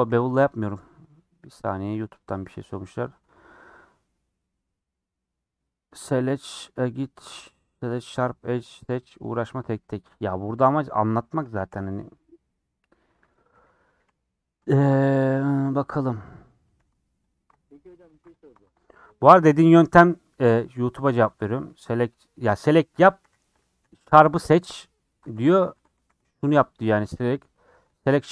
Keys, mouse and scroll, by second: 10.4 scroll down 2, 10.6 middle click, 11.0 Tab, 11.2 middle click, 11.7 scroll up 3, 11.9 middle click, 12.6 scroll down 2, 13.3 click, 13.5 scroll up 3, 14.0 /, 14.6 Tab, 14.7-16.0 middle drag, 16.0 scroll up 2, 23.2 /, 23.6 scroll down 5, 23.8 a, 25.2 Tab, 25.4 a, 25.7 Tab, 25.9 a.